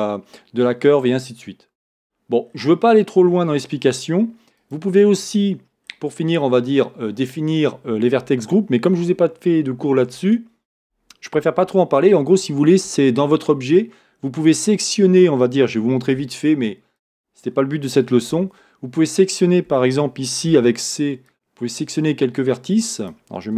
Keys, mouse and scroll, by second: 2.7-4.8 scroll down 1, 5.5 scroll down 1, 18.6 Tab.